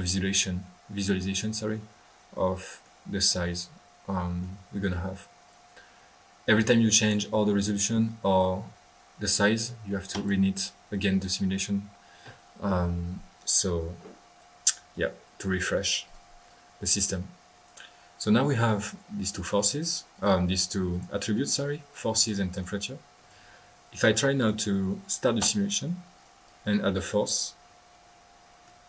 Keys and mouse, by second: 3.3-4.6 middle drag, 5.4-5.8 drag, 6.9-7.3 drag, 14.4 right click, 15.7-16.4 drag, 16.4 click, 17.3 click, 18.5-18.9 right drag, 19.8-20.5 drag, 20.9-21.4 drag, 22.1 drag, 22.5 drag, 23.2 click, 24.3 click, 25.4 click, 26.1 drag, 26.4-26.7 drag, 27.2-28.8 middle drag.